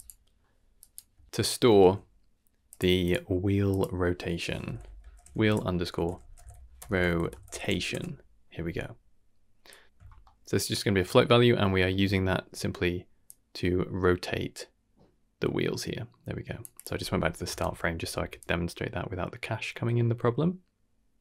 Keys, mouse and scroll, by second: 0.8 click, 1.1 s, 3.7-7.9 drag, 4.8 e, 6.2 t, 6.9 BackSpace, 7.0 BackSpace, 9.6 click, 9.8 shift+Left, 10.2-10.8 shift+middle drag, 11.1-11.5 middle drag, 11.7-12.1 scroll up 3, 12.1 shift+middle drag, 13.2-16.6 drag, 16.7 click, 18.3-21.2 shift+drag.